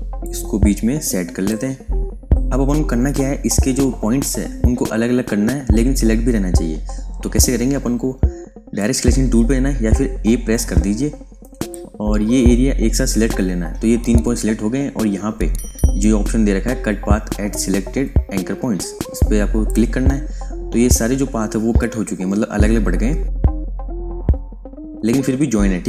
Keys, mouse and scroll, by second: 0.2 click, 8.7 click, 11.6 click, 19.6 click, 23.6 click.